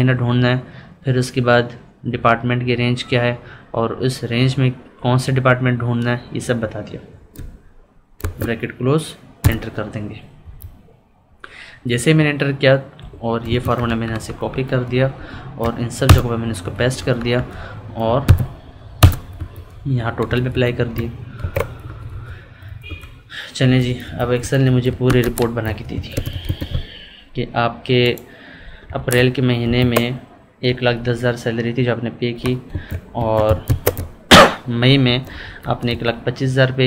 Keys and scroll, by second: 10.4 Up, 13.4 ctrl+c, 16.7 Down, 18.2 alt+=, 19.3 Up, 21.4 ctrl+r, 21.8 Right, 22.6 Left, 23.6 Up, 24.1 Left, 24.4 Up, 29.6 ctrl+b, 30.6 Right, 32.7 ctrl+a, 35.0 Up, 35.3 Right, 35.6 Down, 35.8 Left.